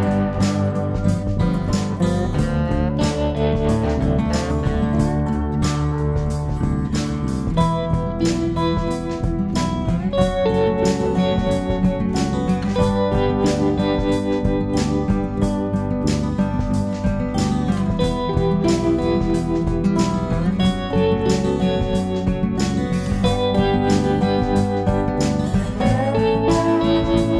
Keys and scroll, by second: 1.1 typing, 4.7 typing, 12.9 typing, 14.1 ctrl+s, 15.2 b.